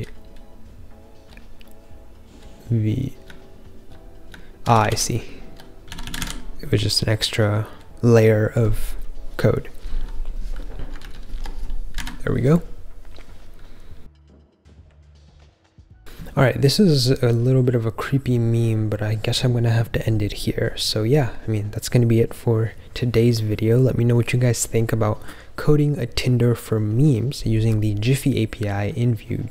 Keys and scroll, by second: 0.0-6.0 typing, 6.1 super+s.